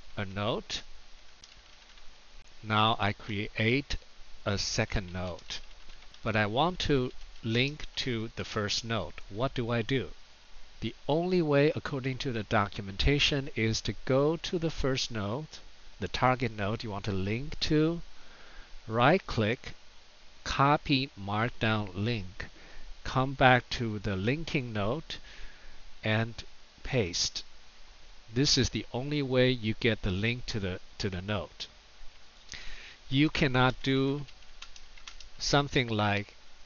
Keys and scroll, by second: 0.0-1.8 typing, 3.3-8.3 typing, 26.8 super+v, 33.1 Return, 33.7-35.2 typing.